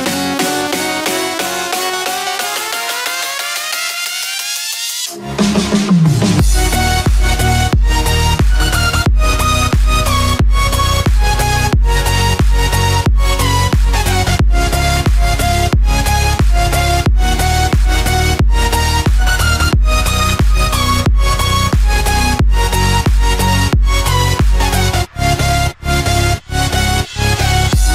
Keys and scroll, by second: 14.9 ctrl+-.